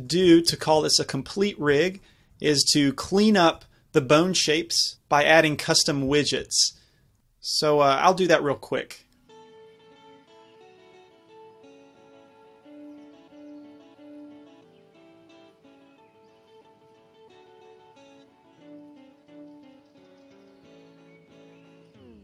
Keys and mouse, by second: 3.6 z, 6.2 z, 9.8 a, 9.8 a, 10.2 alt+g, 11.0 alt+r, 11.5 z, 12.0 ctrl+Tab, 12.7 shift+c, 13.2 KP_Decimal, 14.0 middle drag, 14.5 shift+a, 15.9 click, 16.9 Tab, 17.6 r, 19.2 Tab, 20.0 click.